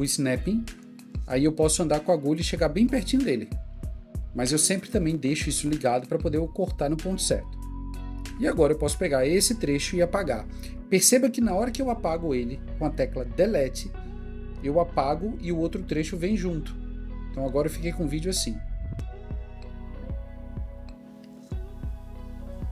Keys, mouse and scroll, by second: 10.7 typing, 15.3 typing.